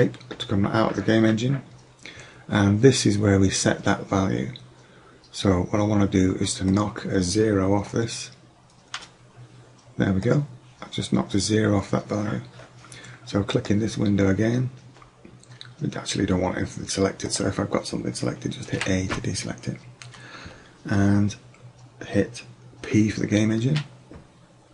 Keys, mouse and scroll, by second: 6.7-8.6 drag, 9.0 BackSpace, 10.3-11.9 drag, 13.6-14.3 right drag, 17.3 right click, 18.8 a, 23.7 p.